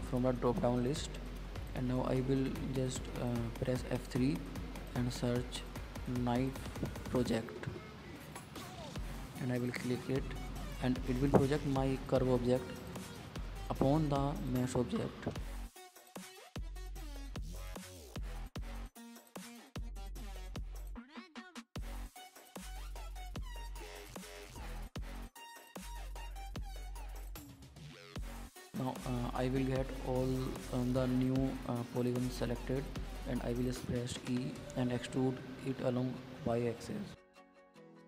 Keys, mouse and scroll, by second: 0.1-1.1 drag, 1.1 middle click, 1.9 KP_1, 3.6 F3, 9.2 click, 9.7-11.3 middle drag, 12.2 middle click, 12.6-13.0 scroll down 7, 13.0 middle click, 13.3-14.1 scroll up 7, 14.1-15.6 middle drag, 17.6-18.4 drag, 19.0 scroll down 5, 19.3 click, 19.9 click, 20.4 KP_Decimal, 20.9-21.7 scroll up 6, 21.7-23.2 shift+middle drag, 23.4 Tab, 23.6 middle click, 23.9 click, 24.3-24.8 scroll down 3, 24.8 shift+middle click, 25.3-25.7 scroll up 3, 25.7-28.1 shift+middle drag, 30.2 ctrl+z, 30.5 middle click, 30.7-31.3 scroll down 6, 31.3-32.8 shift+middle drag, 32.8-33.3 scroll up 4, 33.3 shift+middle click, 33.8 scroll up 1, 34.0-35.5 middle drag, 35.7 e, 37.8-38.0 middle drag.